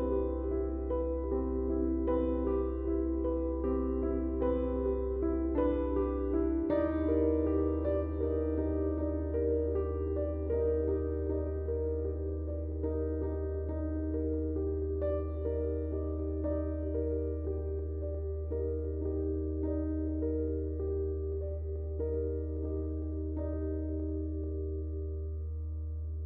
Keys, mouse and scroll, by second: 0.5 space, 0.7 click, 1.0 space, 1.3 ctrl+click, 8.7-18.1 drag, 15.5 typing, 19.6 click, 19.6 typing.